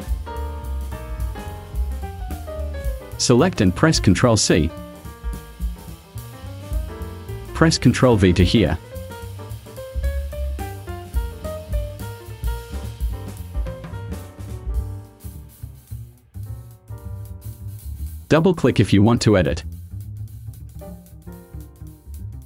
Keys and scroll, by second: 4.6 ctrl+c, 8.0 ctrl+v.